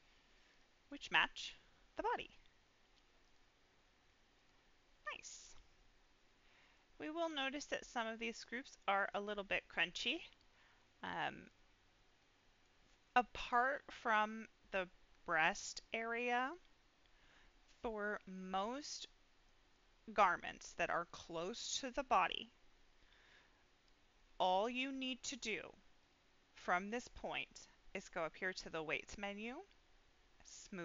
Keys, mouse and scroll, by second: 0.5 click, 0.5-1.1 scroll up 2, 1.5 middle click, 2.1-2.4 scroll up 2, 3.2 click, 4.3 click, 5.2 click, 6.7 middle click, 7.3-7.9 scroll up 2, 7.9 middle click, 9.0 middle click, 11.4 click, 11.9-12.6 scroll down 2, 12.1 middle click, 12.8 middle click, 18.0-18.4 scroll down 2, 18.3-20.1 middle drag, 26.0-29.0 drag.